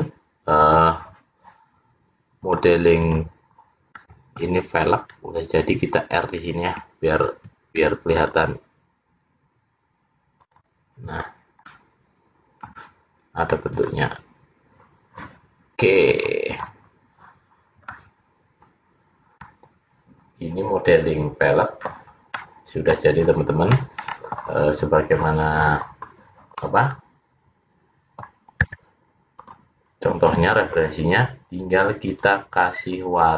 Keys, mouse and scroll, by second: 0.7 click, 2.5 click, 4.1 middle click, 5.1 scroll up 1, 7.4 ctrl+r, 11.8 middle click, 14.4 click, 16.2 click, 17.6-18.2 scroll down 3, 18.0 middle click, 22.5 middle click, 23.4-24.3 scroll down 4, 23.9 middle click, 26.8 middle click, 32.2 click, 32.9 click.